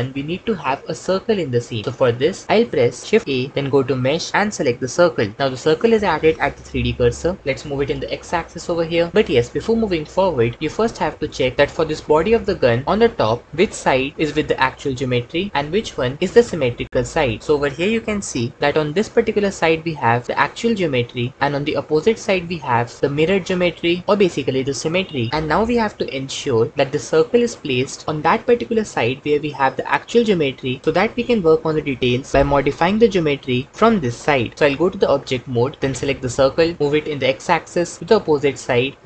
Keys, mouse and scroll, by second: 3.2 shift+a, 7.4 g, 7.7 x, 12.4 Tab, 17.4 l, 34.5 Tab, 36.8 x, 38.9 g.